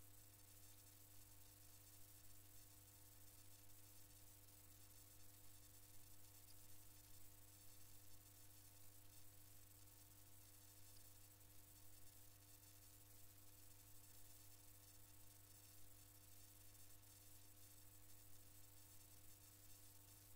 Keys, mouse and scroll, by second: 2.4 ctrl+KP_2, 3.5 ctrl+KP_2, 4.4 ctrl+KP_2, 5.2 ctrl+KP_2, 6.2 ctrl+KP_2, 7.0 ctrl+KP_2, 7.8 ctrl+KP_2, 8.6 ctrl+KP_2, 10.0 ctrl+KP_5, 10.7 ctrl+KP_5, 11.5 ctrl+KP_5, 12.2 ctrl+KP_5, 13.0 ctrl+KP_5, 13.7 ctrl+KP_5, 20.1 ctrl+KP_3.